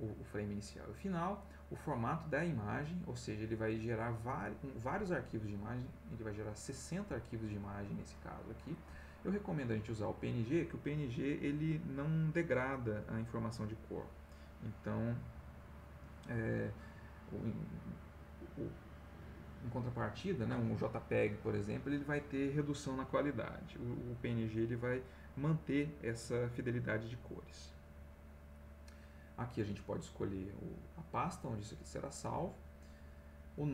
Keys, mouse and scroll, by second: 1.7 click, 5.4 click, 30.6 click, 32.3 click, 33.5 click.